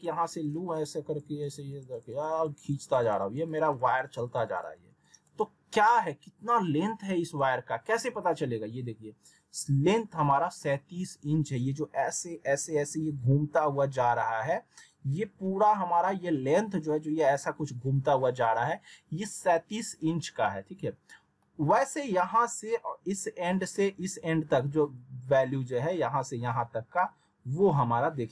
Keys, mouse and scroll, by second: 5.2 right click, 7.3 click, 21.1 scroll down 1, 21.4 middle click.